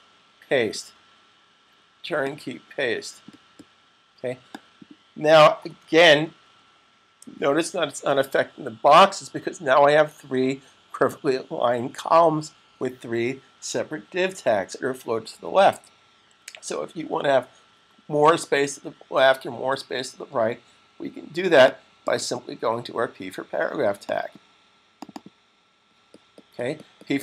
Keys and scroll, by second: 6.1-7.0 typing.